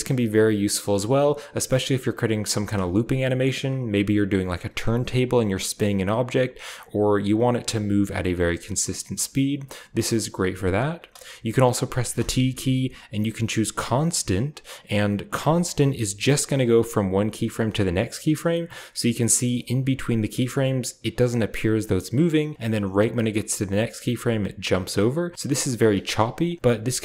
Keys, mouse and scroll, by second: 2.3 space, 6.6-9.5 drag, 9.6 space, 10.8 space, 12.0 t, 15.2 click, 16.3 click, 16.9-18.2 drag, 19.4-22.3 drag, 22.5-25.7 drag, 25.8 space, 25.9-27.0 drag.